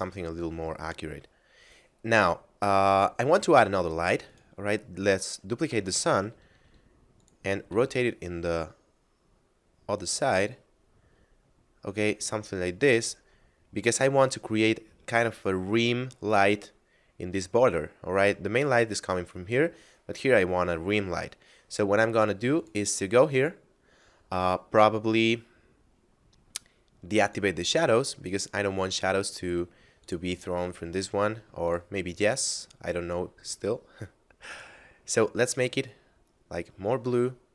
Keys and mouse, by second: 0.1 middle click, 4.3 right click, 5.5 shift+d, 6.1 x, 7.2 click, 7.7 r, 7.9 z, 12.9 click, 22.6 click, 27.1 click, 29.9 click, 34.3 click.